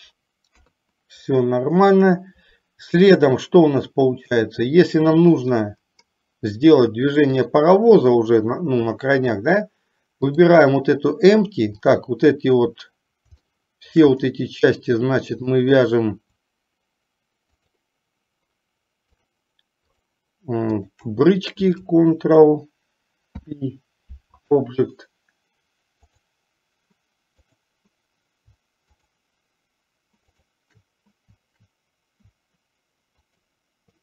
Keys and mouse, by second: 0.6 KP_3, 7.6 click, 12.0 click, 13.6-14.2 shift+middle drag, 15.5 click, 17.7 shift+click, 19.2 shift+click, 21.0 shift+click, 26.1 click, 27.5 click, 30.5 shift+click, 33.4-33.7 shift+drag.